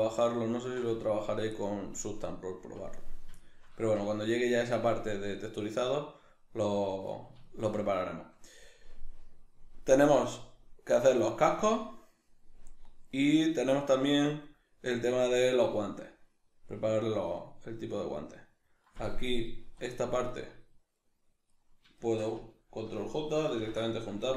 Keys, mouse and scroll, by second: 18.9 right click, 19.5 right click, 20.3 right click, 20.9 right click, 21.5 right click, 22.0 shift+right click, 23.7 ctrl+j.